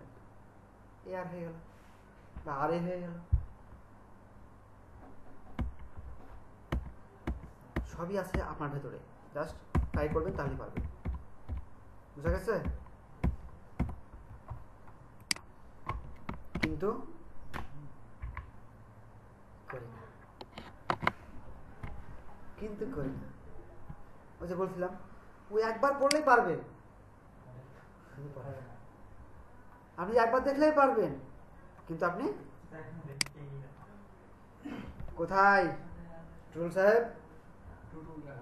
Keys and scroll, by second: 5.6 Right, 7.2 Right, 7.7 Right, 8.3 Right, 9.7 Left, 9.9 Left, 10.1 Left, 10.3 Left, 10.4 Left, 10.7 Left, 11.0 Left, 11.4 Left, 12.2 Left, 12.6 Left, 13.2 Left, 13.7 Left.